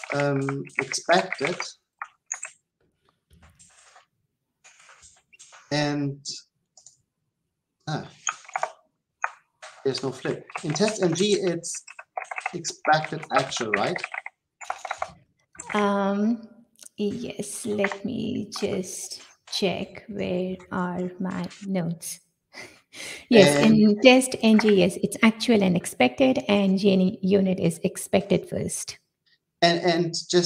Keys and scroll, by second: 4.7 ctrl+c, 12.1 Delete, 20.4 ctrl+x, 27.6 Delete.